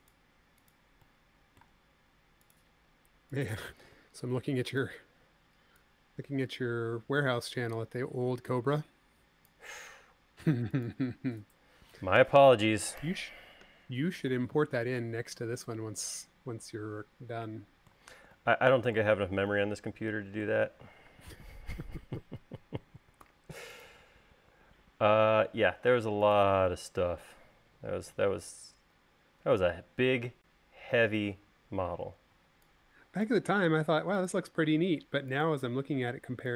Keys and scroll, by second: 13.6 u, 21.7 u, 23.8 u, 32.9 e, 34.1 l, 36.3 l.